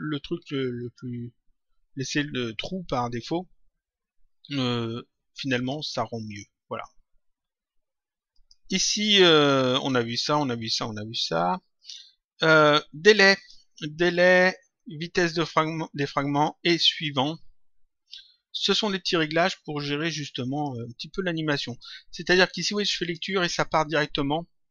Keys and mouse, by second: 0.7 click, 5.5 click, 8.3 click, 11.7 click, 13.3 click, 15.3 click, 18.5 click, 20.0 click, 21.6 click, 22.9 click.